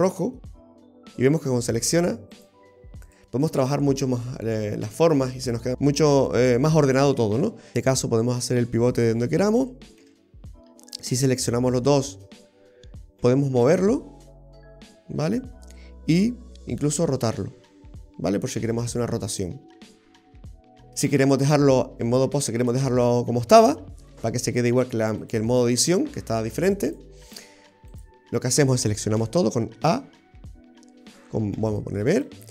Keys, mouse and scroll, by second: 0.4 middle click, 1.3 right click, 2.4 right click, 3.1 right click, 3.5-3.8 scroll down 2, 3.8 middle click, 5.7 scroll up 5, 5.8 middle click, 7.7 right click, 7.7 g, 10.1 ctrl+z, 11.0 shift+right click, 13.3 g, 16.3 r, 20.4 ctrl+z, 25.3 click, 26.9 click, 29.3 a, 30.1 a, 31.6 b.